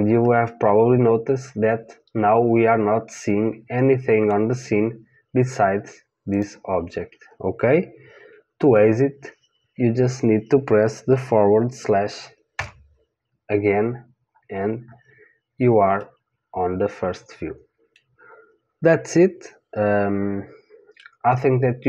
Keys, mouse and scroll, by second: 4.7-6.3 middle drag, 6.3 click, 12.5 KP_Divide, 14.2-18.0 middle drag, 21.3-21.8 middle drag.